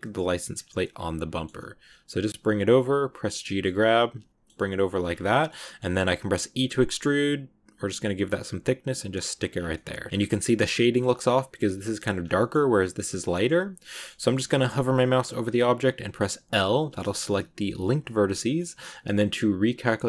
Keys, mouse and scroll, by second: 0.2 g, 0.6 scroll up 1, 0.7 middle click, 1.5 g, 2.8 g, 3.5 middle click, 4.5 g, 5.0 scroll down 2, 5.1 middle click, 5.7-6.1 scroll up 3, 6.4 e, 9.4 scroll down 1, 9.6 middle click, 10.1 scroll down 4, 10.5 middle click, 11.0 scroll up 2, 12.1 scroll down 2, 12.2-13.3 shift+middle drag, 13.3 scroll up 2, 13.8-16.4 middle drag, 16.4 l, 18.2 shift+scroll up 1, 18.2-20.0 shift+middle drag.